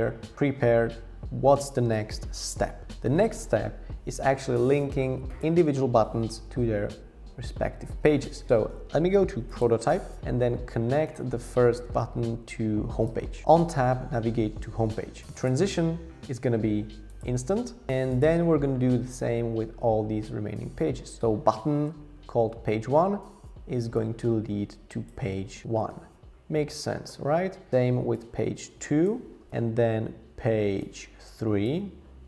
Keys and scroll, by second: 29.5 Tab.